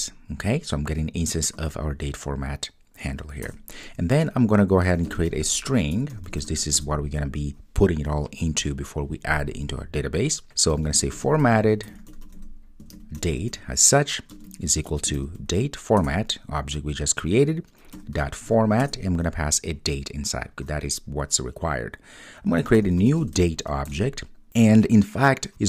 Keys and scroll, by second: 6.8 Return, 16.0 Return, 24.1 Return.